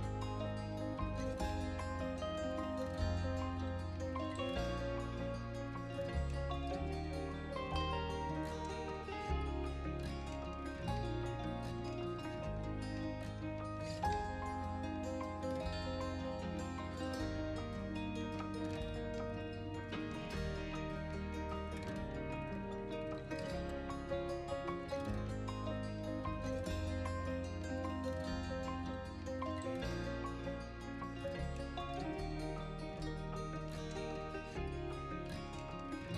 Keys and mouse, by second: 0.1 shift+z, 1.6 r, 1.8 z, 4.2 r, 4.4 z, 6.4-7.6 middle drag, 7.9 g, 8.4 shift+z, 8.8 drag, 9.0-10.3 middle drag, 10.4 drag, 10.7-11.2 drag, 12.0 shift+d, 12.3 shift+z, 13.8 right click, 14.0 r, 14.2 z, 15.9-17.5 middle drag, 17.8 middle click, 18.2-18.7 middle drag, 18.8 KP_1, 19.3 KP_3, 19.9-20.7 middle drag, 20.9 middle click, 21.9 g, 22.2 shift+z, 23.5 r, 23.6 z, 24.2 right click, 24.5-24.8 middle drag, 25.9 shift+d, 26.3 shift+z, 27.8 click, 28.2 r, 28.3 z, 29.5 click, 30.0 middle click, 31.0 middle click, 31.6 middle click, 32.1 r, 32.3 z, 33.0 right drag, 33.2-33.6 middle drag, 34.1 right click, 34.6 shift+d, 35.1 shift+z.